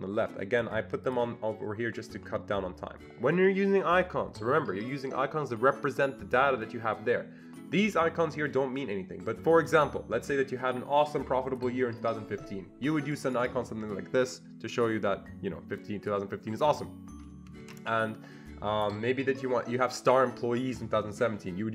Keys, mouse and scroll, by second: 13.1 click, 13.9-20.0 drag, 17.7 ctrl+z, 21.4 click.